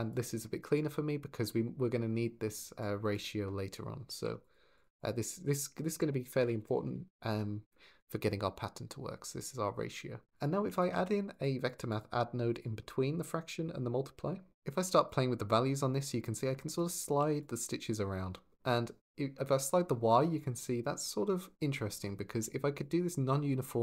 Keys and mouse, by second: 3.9 ctrl+j, 4.2 click, 4.5 click, 4.8 click, 5.7 F2, 10.8 shift+d, 11.1 click, 11.5 click, 11.8-12.4 drag, 14.9-15.9 shift+drag, 16.9 ctrl+z, 17.3 shift+click, 17.4 shift+click, 17.6 shift+click, 18.0 shift+click, 18.3 click, 18.5 click, 18.6 click, 18.8 click, 18.8 click, 19.0 shift+click, 19.1 shift+click, 19.3 shift+click, 20.5 shift+click, 22.0 ctrl+z, 22.7 shift+middle click, 23.2 shift+click, 23.6 shift+click.